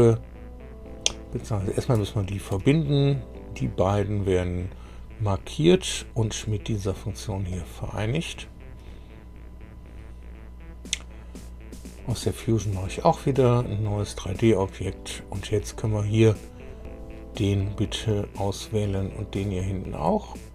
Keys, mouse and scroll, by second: 1.5 click, 2.2 shift+click, 7.5 click, 11.9 click, 13.4 click, 14.6 scroll down 1, 15.4 click, 16.6 click, 17.4-17.7 scroll down 1, 18.0-19.1 middle drag, 19.4 scroll up 1.